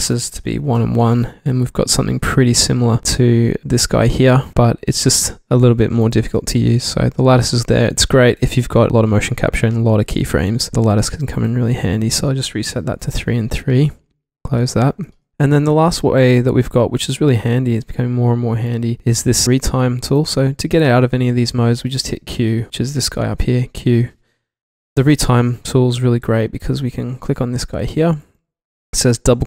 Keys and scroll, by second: 0.7 1, 0.7 Tab, 1.1 1, 1.3 Tab, 8.7 super+z, 12.9 3, 13.0 Tab, 13.1 3, 13.3 Tab, 23.6 q.